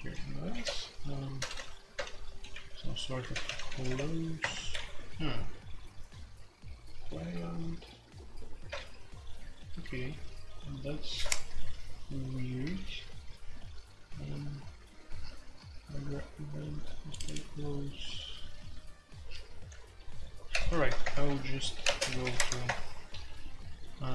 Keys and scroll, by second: 0.0-7.6 typing, 8.8 shift+k, 20.5 ctrl+c, 21.0 shift+Return, 21.7-22.2 typing, 22.3 Tab, 22.6 Return.